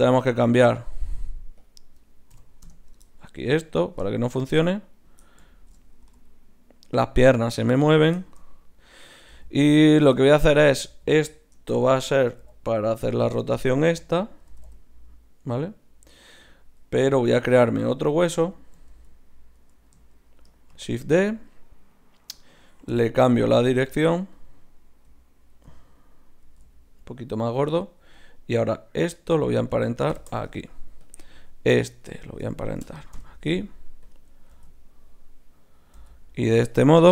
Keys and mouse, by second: 1.6 right click, 5.0-6.0 right drag, 6.0-7.5 drag, 6.0 g, 7.6-10.1 middle drag, 9.3 z, 10.1 Tab, 10.9 middle click, 11.6 Tab, 12.4 r, 14.0 z, 14.5 r, 17.1 Tab, 18.0 z, 18.9 z, 20.7 shift+d, 23.0 w, 26.4 ctrl+alt+s, 27.7-29.7 drag, 28.5-30.9 right drag, 30.1 ctrl+p, 31.6-33.8 right drag, 33.1 ctrl+p, 34.5 z, 35.9 z, 37.0-37.1 drag.